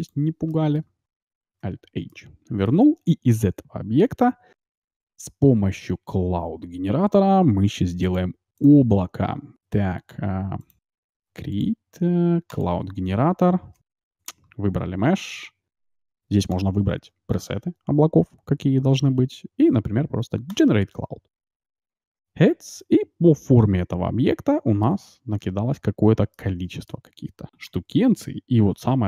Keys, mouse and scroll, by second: 0.5 middle click, 1.5 alt+h, 4.0 t, 8.0-15.6 drag, 14.1-16.5 right drag, 16.5-22.3 drag, 22.7-24.5 middle drag, 26.3 middle click, 27.7 t, 27.9 middle click, 28.8 shift+z.